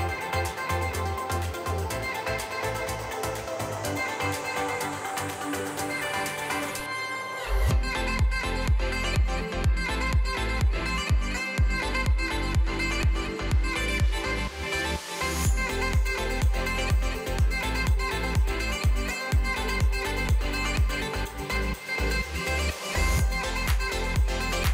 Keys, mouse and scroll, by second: 1.5 click, 1.9 l, 2.2 g, 3.7 l, 4.5 a, 4.6 a, 5.0 l, 8.1 g, 10.1 g, 12.4 click, 13.7 l, 14.2 g, 16.7 click, 19.1-21.2 typing, 23.0 ctrl+z, 23.4 g.